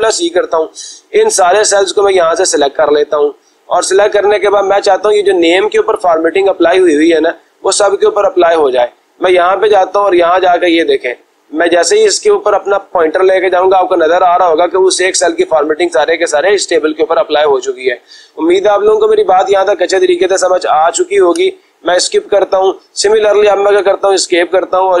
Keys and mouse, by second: 0.0 ctrl+c, 4.0-5.1 drag, 8.6 click, 21.3 Escape, 23.7 Escape.